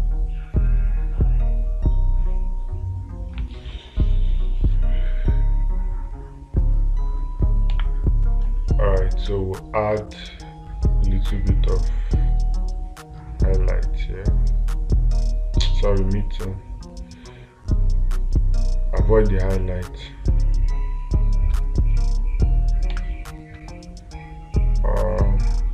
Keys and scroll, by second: 8.2 space, 23.3 space.